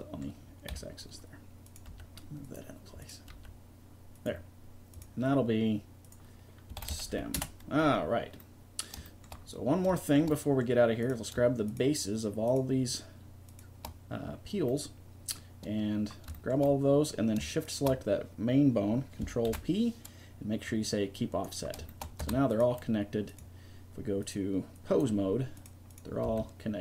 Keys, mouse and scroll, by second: 0.7 KP_3, 1.7 right click, 1.9 g, 3.3 g, 6.0-7.4 drag, 11.0-15.2 right drag, 17.6-19.2 right drag, 19.2 click, 19.5 ctrl+p, 22.2 Tab, 26.2 g.